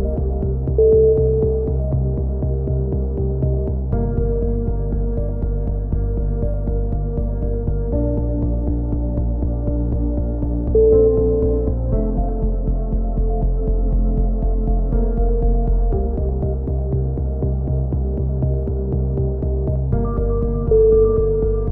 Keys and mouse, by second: 0.6 z, 1.4 click, 13.3 middle click, 14.1 click, 15.5 middle click, 16.2-17.8 drag.